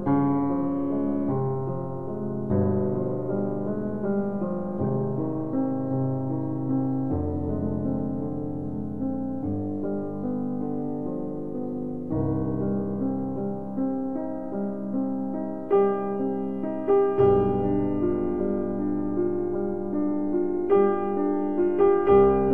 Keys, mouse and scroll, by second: 0.2 click, 8.5 click, 8.5 click, 13.1 ctrl+Num_Lock, 13.1 click, 13.7 ctrl+r, 15.8-16.8 scroll up 1, 21.8 click.